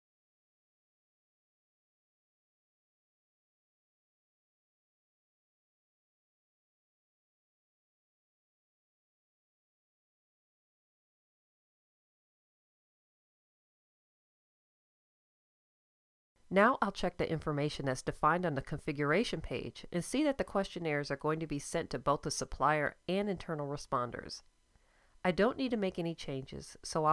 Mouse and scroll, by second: 8.7-15.3 drag, 18.9-26.8 drag, 27.0 click.